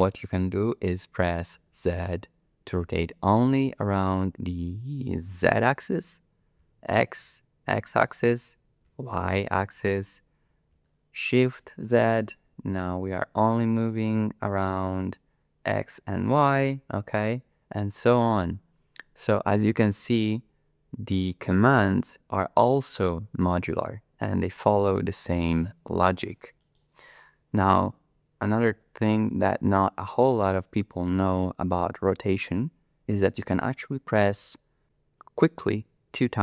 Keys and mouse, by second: 1.6 z, 6.6 x, 8.9 y, 10.7 shift+z, 26.6-29.0 drag.